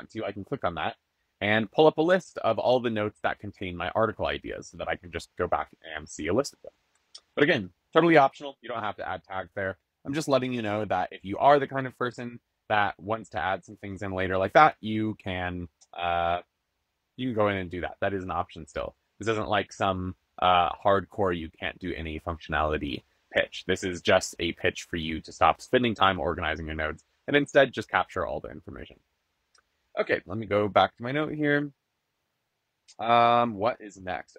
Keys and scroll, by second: 6.9 super+[.